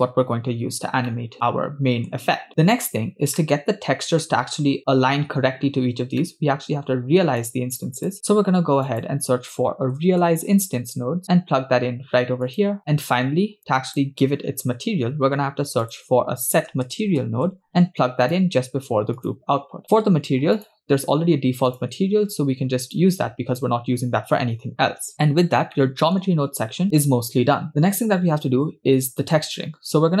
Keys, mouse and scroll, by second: 1.3-2.5 middle drag, 2.5 click, 3.5-4.5 middle drag, 4.9-5.3 scroll up 4, 6.4 middle click, 7.6 click, 8.2 shift+a, 12.8 middle click, 12.8 scroll down 2, 13.7 click, 15.0 shift+a, 19.9 middle click, 19.9-20.3 scroll up 6, 20.6 click, 21.7-23.5 drag, 24.9-25.4 scroll down 6, 25.8 middle click, 27.0 scroll down 1.